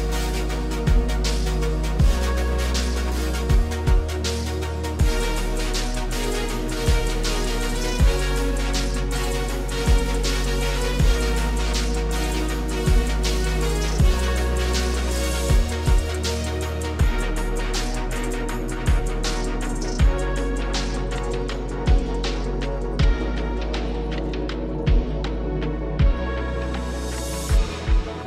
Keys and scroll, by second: 9.1 super+z.